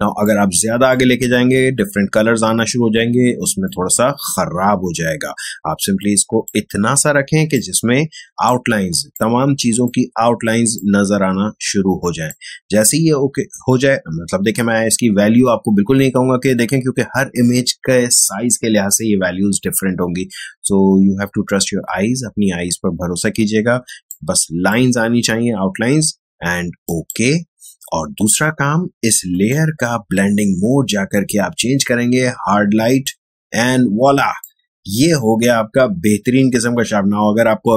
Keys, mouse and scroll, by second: 3.6-7.0 drag, 7.0 space, 7.5 click, 7.7 space, 9.1 click, 9.2 space, 10.7 click, 10.8 space, 23.8 space, 24.0 click, 24.3 space, 26.8 click, 29.3 click, 32.8 click, 34.0 space, 34.3 click, 34.5 space.